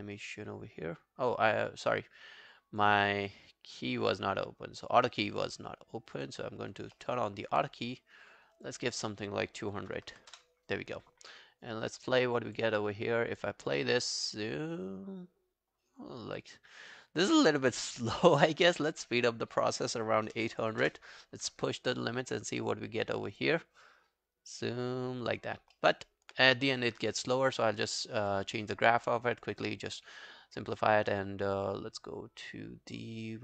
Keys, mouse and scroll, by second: 7.0 alt+middle click, 7.2 alt+right click, 10.0-10.3 typing, 20.3-20.8 typing, 25.8 alt+middle click, 26.0 alt+right click.